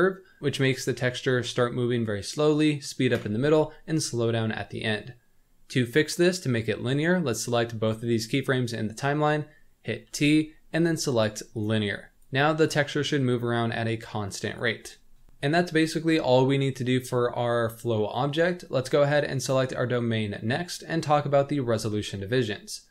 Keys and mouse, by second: 4.7 click, 4.9-7.9 drag, 10.0 t, 12.1 click, 12.6-14.5 drag, 15.2 middle click, 19.4 click.